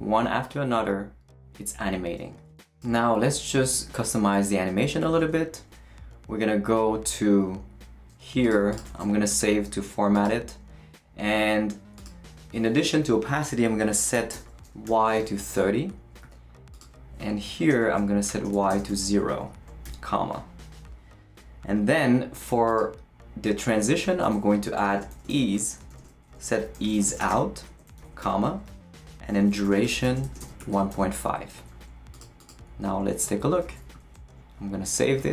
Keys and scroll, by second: 5.2 super+w, 8.9 super+s, 14.6-16.1 typing, 17.7 Return, 18.0-19.8 typing, 24.0 Return, 24.3-28.0 typing, 28.2 Return, 29.2-31.4 typing, 33.6 super+s.